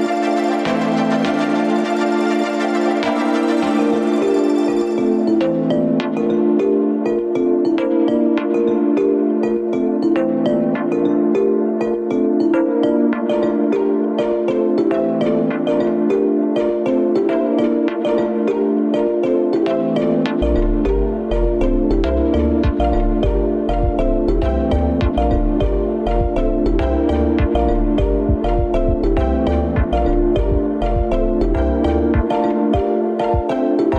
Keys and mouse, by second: 1.6 click, 5.1 ctrl+s, 6.8 click, 7.3 Tab, 8.0 middle click, 8.9 shift+a, 13.9 alt+z, 14.8 s, 21.0-24.4 drag, 24.4 ctrl+z, 25.2-26.0 right drag, 26.1 Escape, 26.7-28.6 middle drag, 31.3 shift+a.